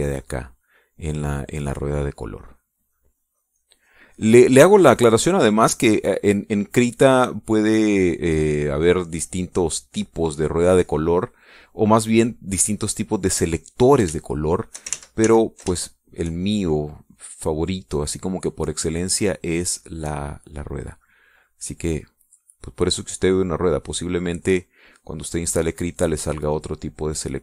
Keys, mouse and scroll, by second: 0.9-5.9 drag, 12.7-13.7 drag, 14.6 click, 15.2 shift+click, 15.9 ctrl+shift+z, 16.8 ctrl+shift+click, 17.5-21.4 shift+drag, 22.2 middle click, 22.5 click, 22.9-27.1 drag.